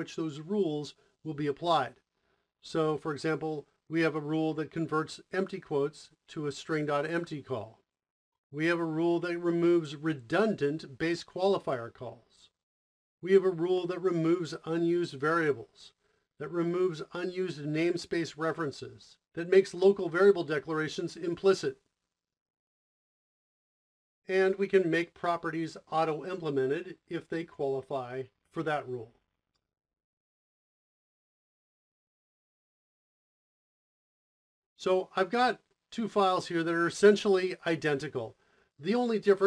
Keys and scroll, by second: 32.2 o, 32.4 Escape.